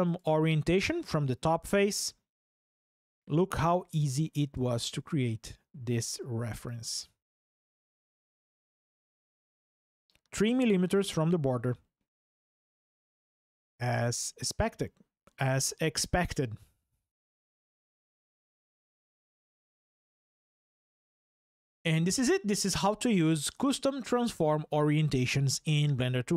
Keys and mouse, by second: 0.0-1.4 drag, 3.6 ctrl+click, 11.3 click, 11.3-12.6 middle drag, 16.2 click.